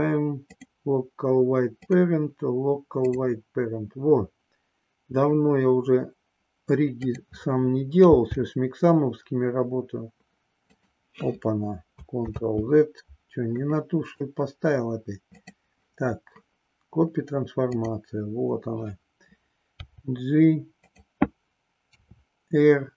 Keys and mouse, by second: 1.8-3.1 drag, 7.0 click, 8.0 g, 12.3 ctrl+z, 13.6 middle click, 17.6 click, 19.7 g, 21.9 r.